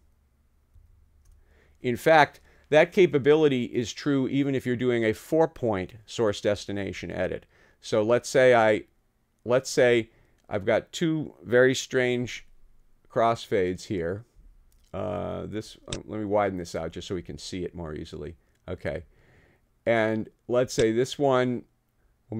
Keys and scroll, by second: 0.8 super+z.